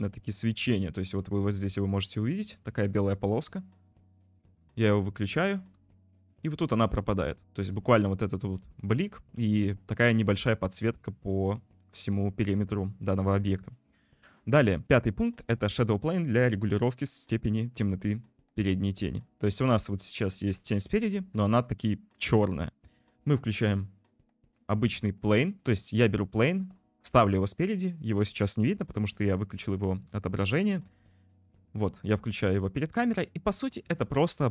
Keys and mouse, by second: 4.6 click, 5.5 click, 6.3 click, 6.9 click, 9.7 shift+middle drag, 10.6 shift+middle click, 12.3 ctrl+s, 15.0-18.1 drag, 21.2 ctrl+s, 24.2 c, 24.5 click, 25.3 middle click, 25.9 middle click, 27.0 shift+middle click, 31.6 click, 32.6 click, 32.6 middle click, 33.6 click, 33.8 middle click.